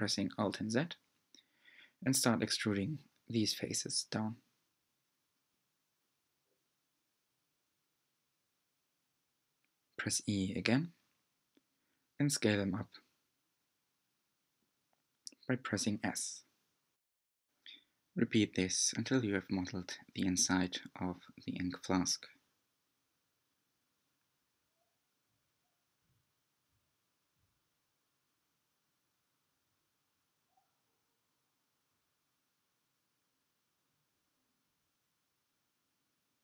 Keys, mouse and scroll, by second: 0.8 g, 5.6 click, 8.1 e, 10.7 s, 16.6 e, 19.3 s, 23.9 e, 28.4 e, 31.1 s, 33.4 g.